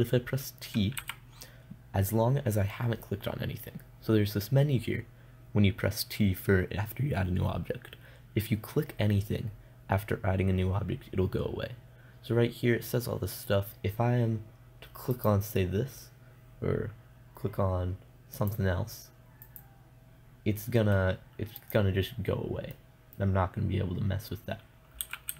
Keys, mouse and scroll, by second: 1.4 t, 15.6-18.2 right drag, 18.8-23.6 right drag, 21.5 middle click, 23.2 middle click.